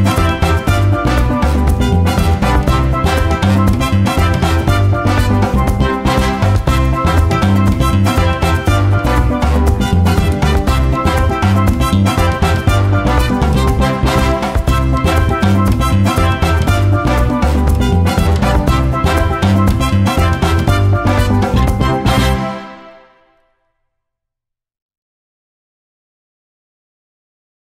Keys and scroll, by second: 2.0 h, 6.7 1, 7.3 g, 12.4 F1, 13.3 F1, 21.5 F1.